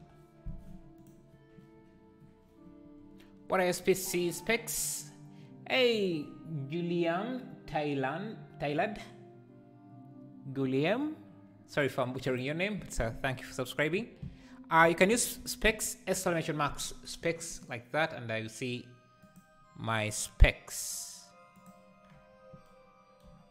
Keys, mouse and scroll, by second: 0.0-22.2 drag.